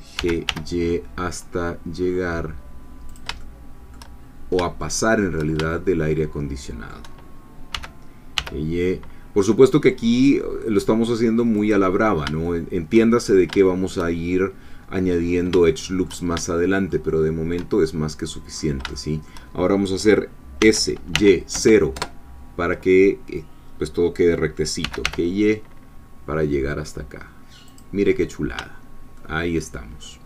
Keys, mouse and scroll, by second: 0.2 g, 0.5 y, 3.1 shift+click, 3.4 shift+middle click, 4.2-4.6 shift+scroll down 3, 4.8 shift+middle click, 5.7-7.5 shift+middle drag, 7.7 g, 11.6 click, 12.4 shift+middle click, 13.2 shift+scroll up 2, 13.6 shift+middle click, 15.7 shift+click, 16.6-17.7 shift+drag, 17.8-18.8 shift+scroll up 3, 18.9 shift+click, 20.6 s, 21.1 y, 21.5 0, 22.0 Return, 24.8 g, 25.0 y, 27.7 click, 28.1-28.6 scroll down 1, 29.2-30.2 shift+middle drag.